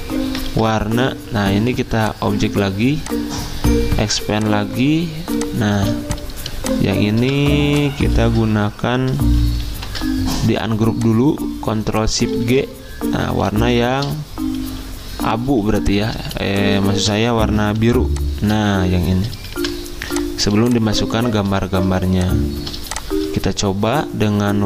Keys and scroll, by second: 0.5 ctrl+z, 1.9-2.6 typing, 5.7 z, 7.1 v, 8.2 ctrl+z, 12.5 ctrl+z, 16.4-17.8 typing, 19.5 v.